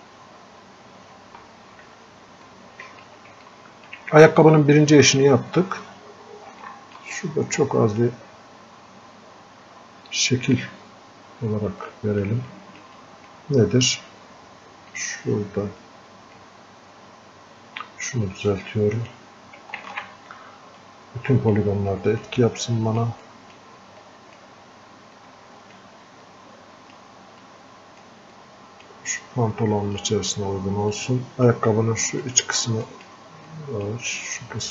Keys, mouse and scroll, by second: 1.4 f, 1.9 f, 2.5 click, 3.5-5.2 alt+drag, 5.2 scroll up 1, 6.6 scroll down 1, 6.7 alt+click, 7.2-10.3 drag, 11.0 scroll down 1, 11.9 click, 12.5 alt+click, 13.0-18.5 drag, 18.5-19.9 drag, 19.9 ctrl+z, 20.8-26.3 drag, 26.3 click, 27.5 click, 28.4 click, 29.3-32.3 drag, 32.3-34.7 drag.